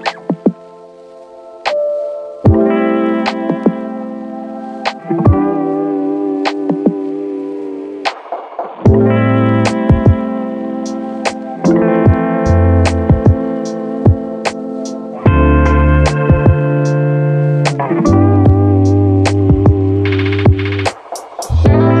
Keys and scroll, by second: 0.6 z, 4.7 space, 5.9 v, 6.6 space, 7.3 space, 18.8 space, 20.0 v, 20.8 space.